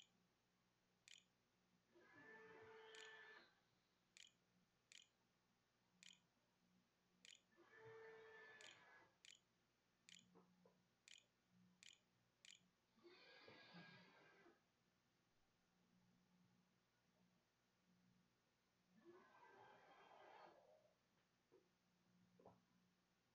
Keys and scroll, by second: 0.0-0.9 typing, 2.2 a, 5.1-12.1 typing, 15.3 e, 22.4 w.